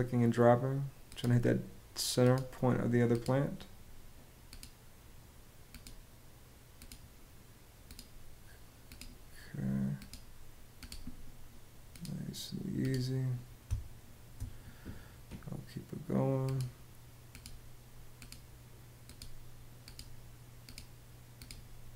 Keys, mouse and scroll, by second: 13.4 space.